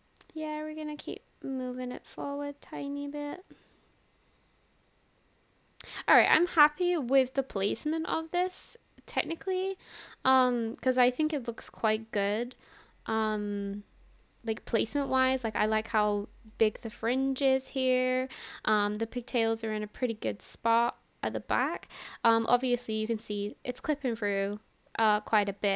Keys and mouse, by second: 1.0-3.3 drag, 3.5-6.3 drag, 3.5-6.3 right drag, 6.9-7.9 drag, 6.9-7.9 right drag, 8.4-10.1 drag, 8.4-10.1 right drag, 10.1 middle drag, 10.9-12.3 middle drag, 14.2 click, 15.3 shift+middle click, 15.6 drag, 15.6 right drag, 15.9-16.5 middle drag, 17.9-18.8 middle drag, 19.1-20.6 middle drag, 22.1-22.7 middle drag, 23.2-23.6 shift+middle drag, 23.7-25.7 middle drag.